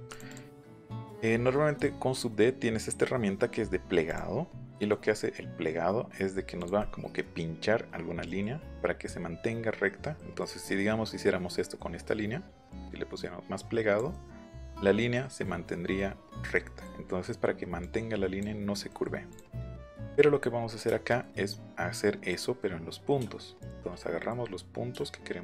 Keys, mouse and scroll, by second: 0.0 click, 0.2 click, 0.4 middle click, 0.7 scroll down 1, 4.0 click, 4.4 middle click, 4.7-5.7 scroll up 2, 5.1 middle click, 6.5 click, 6.7 scroll up 1, 6.8 middle click, 8.2 middle click, 10.1 middle click, 10.6 middle click, 11.5 scroll up 1, 12.7-13.9 drag, 14.1 scroll up 1, 14.2 middle click, 15.9 middle click, 17.8 click, 18.9 middle click, 19.3 click, 19.5 middle click, 20.8 shift+middle click, 22.2 click, 23.5 shift+click, 24.0 middle click.